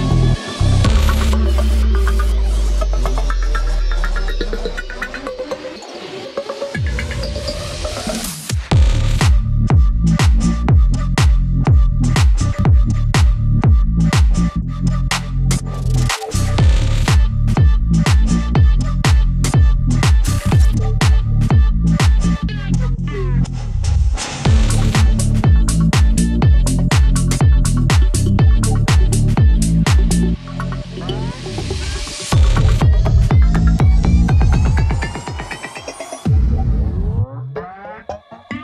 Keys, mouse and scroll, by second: 0.3 scroll down 1, 0.7 scroll up 1, 1.1 scroll down 1, 2.9 click, 3.5 scroll up 1, 4.3 click, 8.1 scroll up 1, 8.5-11.4 drag, 11.4 scroll up 1, 12.8 scroll down 1, 13.6-15.9 drag, 15.9 scroll down 1, 16.6-17.5 scroll down 1, 17.6 click, 18.0 scroll up 1, 18.7-20.1 drag, 20.1-20.5 scroll up 1, 20.5-20.9 scroll down 1, 21.2 scroll up 1, 21.7 click, 22.9-23.3 scroll down 1, 24.1-24.5 scroll up 1, 24.5 click, 29.4 click, 29.7 scroll down 1, 30.3-32.1 drag, 32.1 click, 32.6 ctrl+right click, 33.1 scroll up 1, 34.5 click, 36.3-36.9 scroll down 1, 36.9 click, 38.5 click.